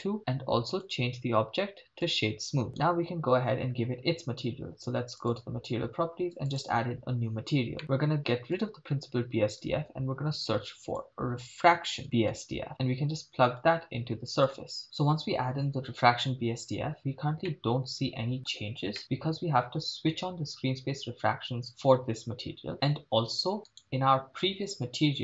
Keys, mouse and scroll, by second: 0.8-2.3 drag, 2.7 scroll up 4, 2.7 right click, 5.2 click, 6.5 click, 7.8 middle click, 8.5 click, 9.2 x, 10.6 shift+a, 12.8 BackSpace, 13.6-14.7 drag, 17.5-19.0 middle drag, 21.1 click, 23.9 click, 23.9 right click.